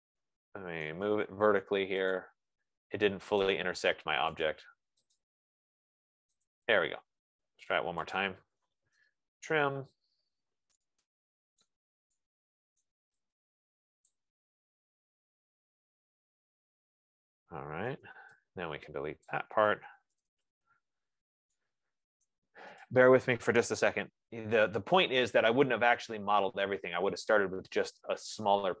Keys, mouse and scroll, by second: 0.0-0.8 typing, 0.6-1.1 scroll, 1.9 typing, 2.5 click, 4.1 click, 4.8 right click, 5.6 click, 7.7 Escape, 8.6 click, 9.5 typing, 11.0 scroll, 12.4 right click, 13.5 right click, 14.5 click, 15.5 F15, 18.6 Return, 19.6 click, 20.2-22.5 typing, 23.1 right click, 23.4 click, 23.9-24.8 typing.